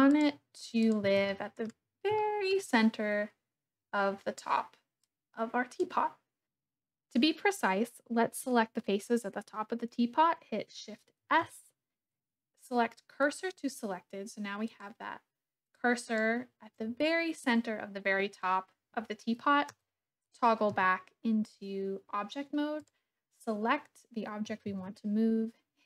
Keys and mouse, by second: 0.2 click, 0.8 click, 1.1 Tab, 1.3 click, 2.2 shift+click, 5.0 click, 11.2 shift+s, 14.6 click, 15.9 click, 19.8 Tab, 20.7 KP_1, 22.7 click, 24.6 shift+a.